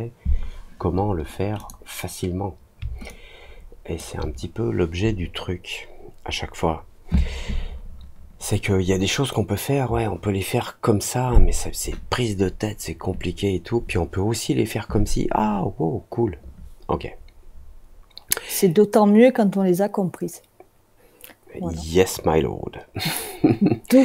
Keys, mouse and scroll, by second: 1.5 click, 3.0 alt+click.